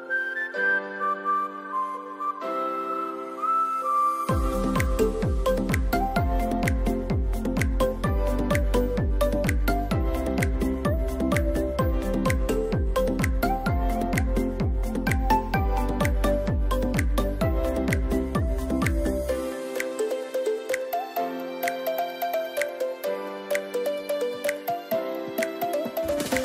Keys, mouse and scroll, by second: 1.6 scroll down 1, 3.2-6.7 drag, 8.8-9.8 typing, 11.1 click, 11.3-14.5 typing, 11.6 click, 12.4 click, 13.2 click, 13.8 click, 14.1 click, 15.7 ctrl+j, 16.7 ctrl+shift+x, 20.6-20.9 scroll up 2, 21.4-23.3 typing, 21.6 click, 23.6-26.3 drag, 26.3 [.